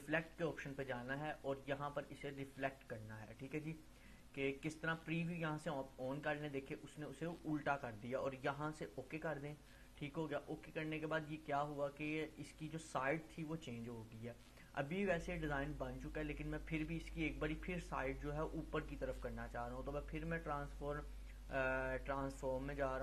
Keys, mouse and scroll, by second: 0.3-0.9 drag, 7.2-13.0 drag, 18.9 right click.